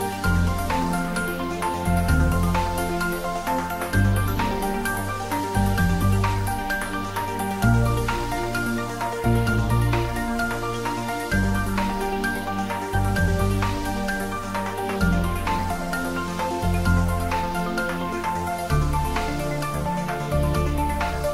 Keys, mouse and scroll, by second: 0.1 g, 1.8 click, 2.4-5.1 typing, 2.9 click, 3.6 click, 6.2 click, 6.9 s, 8.5 click, 9.1 g, 10.0 click, 10.2-11.6 middle drag, 11.6 click, 12.1 s, 12.9 click, 13.2 middle click, 14.1 scroll up 1, 14.4 middle click, 14.9 g, 15.2 x, 15.9 click, 16.1-17.1 scroll down 1, 17.1 s, 17.2 x, 18.3 x, 18.6 click, 18.8 scroll down 1, 20.7 click, 21.0 middle click.